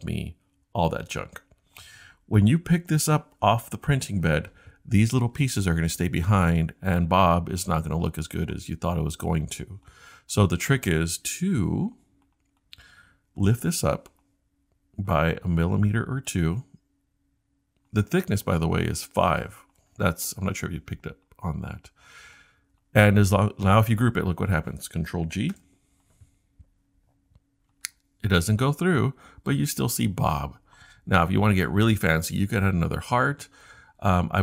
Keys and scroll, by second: 25.5 super+g.